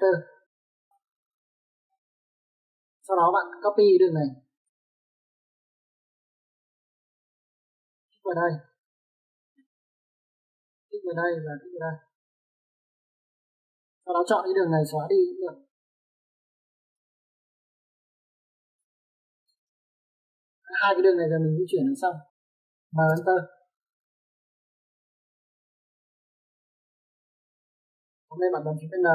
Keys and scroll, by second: 0.8 3, 1.5 Return, 5.5-6.1 typing, 15.0 space, 20.4 e, 20.5 space, 23.9 m, 24.0 space.